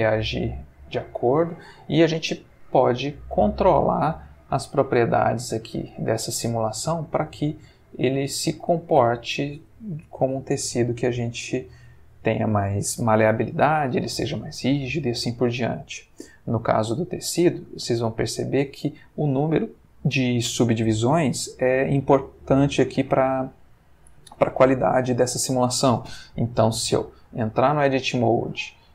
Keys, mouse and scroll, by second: 4.4-5.4 middle drag, 5.4 scroll up 1, 5.5 middle click, 6.1 scroll up 1, 6.2 middle click, 6.8-7.1 scroll up 1, 7.1 middle click, 7.7-9.1 scroll up 1, 18.0-18.8 ctrl+middle drag, 26.9 Escape, 27.6 Tab, 28.5 a.